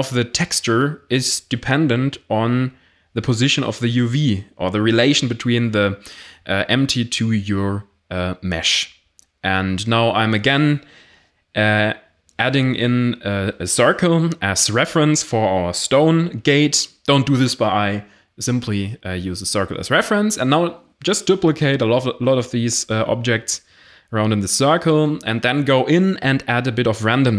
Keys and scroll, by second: 2.3 g, 6.5 1, 7.0 shift+a, 10.9-12.3 typing, 13.6 g, 13.8 z, 16.5 s, 17.0 g, 17.3 x, 18.6 1, 19.0 shift+d, 20.0 shift+d, 21.1 shift+d, 21.6 shift+d, 21.8 shift+d, 23.6-27.3 typing.